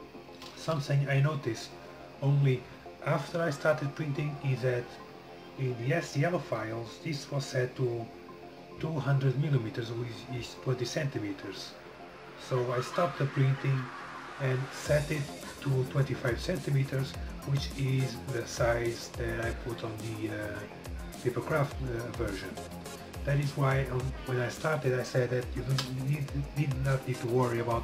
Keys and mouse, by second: 2.9 middle click, 3.5-27.8 drag.